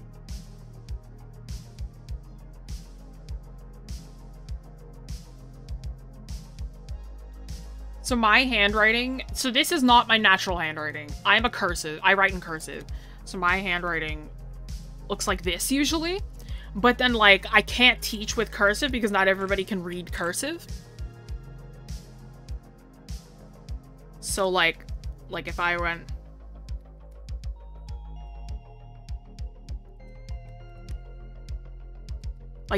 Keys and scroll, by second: 10.6 scroll, 13.3 scroll up 1, 16.6 scroll down 1.